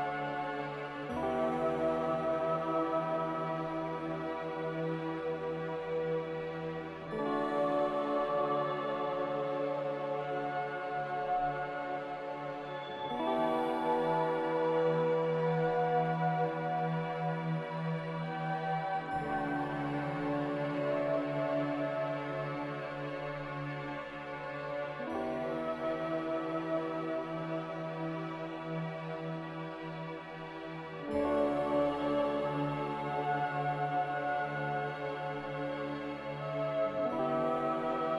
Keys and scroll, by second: 3.4 a, 5.1 ctrl+c, 8.5 ctrl+v, 22.5 z, 24.2 n, 25.7 m, 32.0-32.8 typing, 35.9 b, 37.7 a.